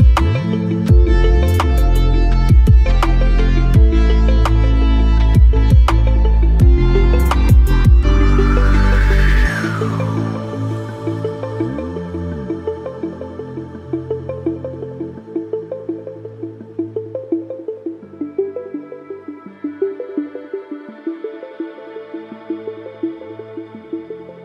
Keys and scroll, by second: 7.1 KP_Add.